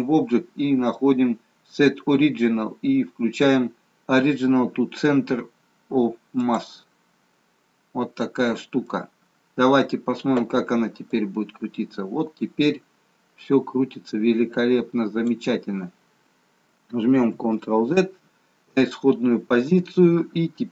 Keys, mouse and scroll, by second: 7.6-8.2 scroll down 3, 8.2 middle click, 11.1 click, 17.3 ctrl+z.